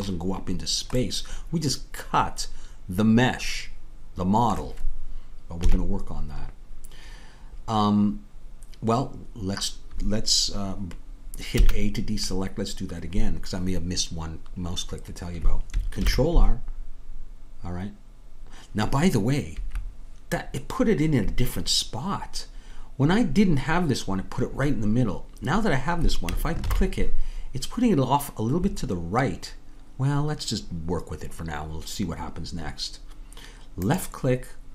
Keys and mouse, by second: 5.6 KP_3, 11.6 a, 16.1 ctrl+r, 26.6 ctrl+r.